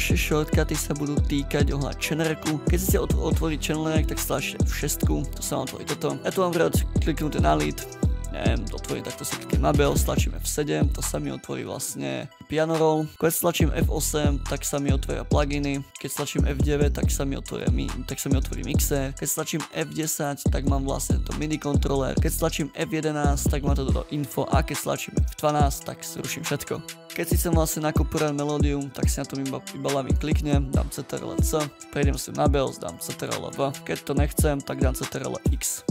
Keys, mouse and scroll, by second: 4.6 F6, 10.0 F7, 12.4 ctrl+scroll down 10, 13.8 F8, 13.8 F8, 15.6-16.5 typing, 19.6 F10, 22.5 F11, 25.3 F12, 30.9 ctrl+c, 32.9 ctrl+v, 35.0 ctrl+x.